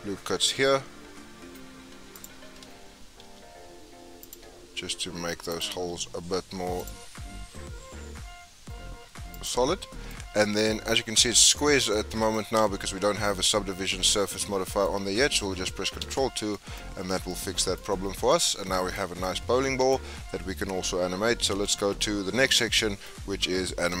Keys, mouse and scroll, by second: 3.2 ctrl+r, 5.8 ctrl+r, 9.6 scroll down 4, 9.8-10.8 middle drag, 10.8 Tab, 11.1-16.0 middle drag, 16.0 ctrl+2, 16.5-18.1 middle drag, 18.1 scroll down 2, 18.3-19.4 middle drag, 19.4 scroll down 2, 19.5-20.3 middle drag, 20.3-21.3 scroll down 3, 21.3-21.6 scroll down 3, 21.6-23.4 shift+middle drag, 23.4-24.0 scroll up 1.